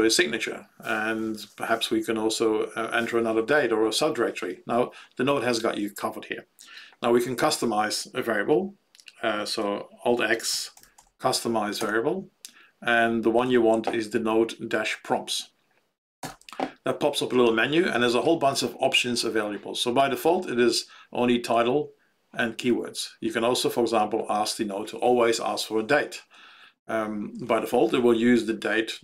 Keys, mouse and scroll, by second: 9.4 alt+x, 10.3-11.5 typing, 11.7 alt+x, 13.4 Down, 16.3 alt+x.